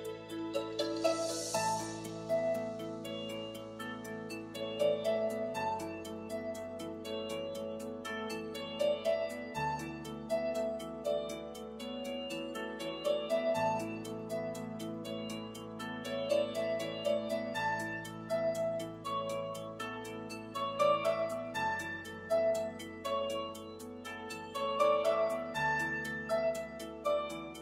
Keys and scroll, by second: 0.3 Escape.